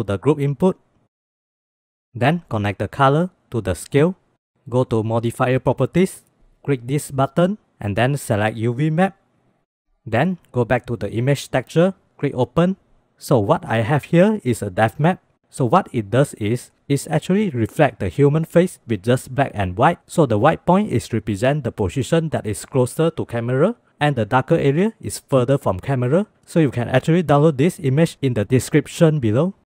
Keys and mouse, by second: 2.3 middle click, 2.3 drag, 2.9-4.5 drag, 6.1 click, 7.4 click, 8.2-9.4 drag, 10.6 click, 12.0 click.